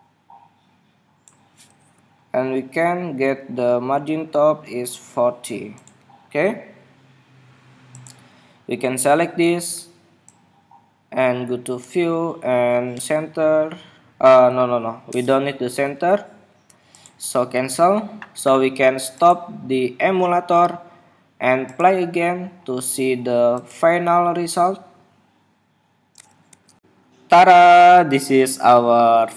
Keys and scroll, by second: 3.3 alt+Up, 4.0 alt+Down.